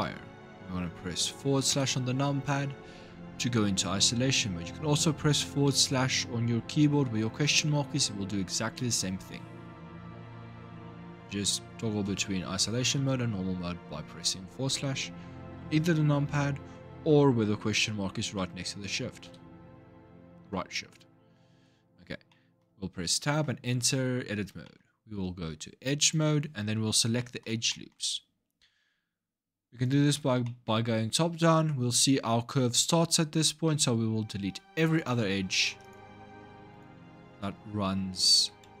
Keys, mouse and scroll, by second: 1.5 KP_Divide, 2.6-3.8 scroll up 4, 10.2-12.6 typing, 19.0 /, 20.4-21.3 scroll up 2, 21.3 Tab, 21.7 scroll up 2, 22.1-25.8 middle drag, 25.8-26.9 drag, 26.9-29.6 middle drag, 29.6 click, 30.2 shift+middle click, 30.7 scroll up 2, 34.7 click, 35.3 alt+shift+click, 35.6 alt+shift+click, 36.5 alt+shift+click, 37.5 ctrl+z.